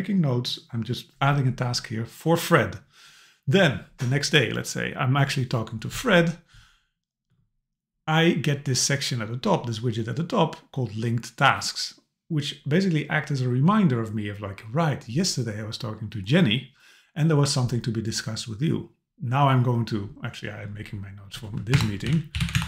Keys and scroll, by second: 21.7 Return.